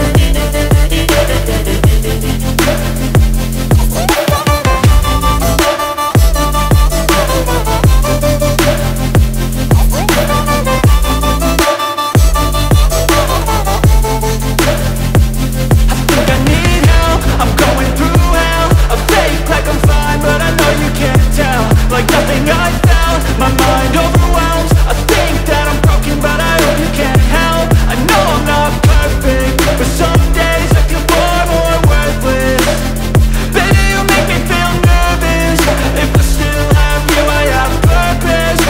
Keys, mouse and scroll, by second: 0.0 click, 0.2 space, 1.7-9.8 drag, 9.8-20.0 drag, 20.6-24.9 drag, 26.6-38.6 drag.